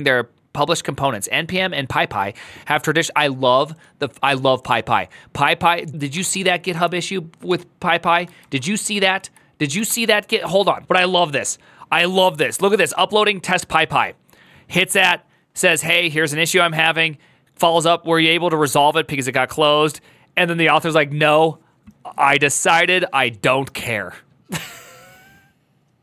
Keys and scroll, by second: 6.0 ctrl+t, 6.3-7.3 typing, 8.2 ctrl+shift+Left, 8.4-10.4 typing, 9.5 Return.